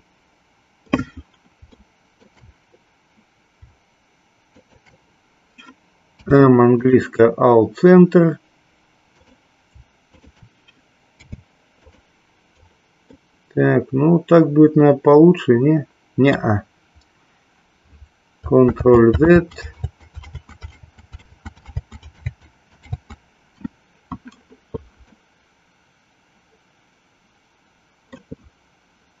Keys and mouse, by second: 1.7 shift+middle click, 4.5 shift+click, 6.1 m, 9.2 click, 10.1 shift+click, 11.0 m, 13.2-16.4 middle drag, 20.2 ctrl+z, 20.6 ctrl+z, 21.6 ctrl+z, 22.1 ctrl+z, 25.1-28.1 middle drag.